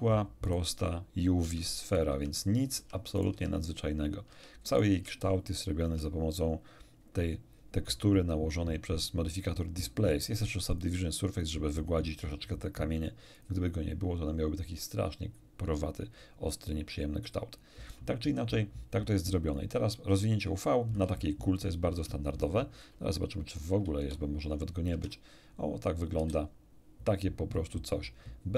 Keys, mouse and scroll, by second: 0.5 right click, 0.7 Tab, 1.5 Tab, 1.9 right click, 3.2 right click, 4.7 click, 4.9 Tab, 5.9 Tab, 10.7 click, 11.3 click, 13.3 click, 17.5 click, 21.1 Tab, 21.9 Tab, 23.7 shift+F10, 24.9 Tab, 26.1 a.